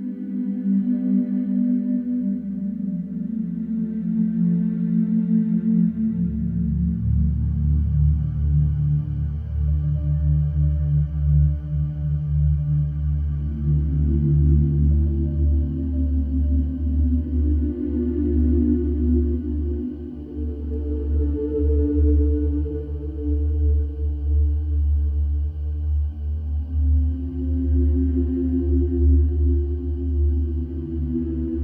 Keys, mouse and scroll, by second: 2.8 scroll up 1, 3.0 shift+middle click, 3.3 scroll up 2, 3.8 g, 7.8 middle click, 8.2 scroll down 2, 8.8 s, 9.9 scroll down 2, 10.4 Tab, 10.7 scroll down 2, 11.1-12.6 middle drag, 16.7-17.3 middle drag, 17.3-17.8 scroll down 3, 17.8-18.4 scroll down 1, 18.4 middle click, 19.0 click, 19.4-19.7 scroll down 2, 19.7-20.1 middle drag, 20.1 scroll down 2, 22.9 scroll down 1, 25.2-26.0 scroll down 1, 26.0 ctrl+alt+KP_0, 27.1 n, 27.8 click, 28.3-31.6 drag.